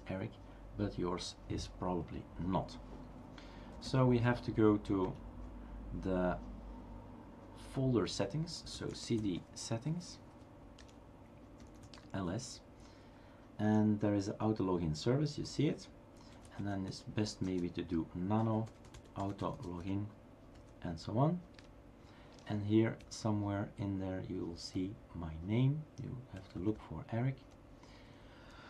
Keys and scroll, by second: 3.5-4.4 typing, 5.1 Return, 8.4-9.2 typing, 10.6 typing, 10.8 Return, 11.9 typing, 16.1-17.0 typing, 18.9-20.3 typing, 20.5 Tab, 21.6 Return, 23.0-25.7 Down, 26.4 Down.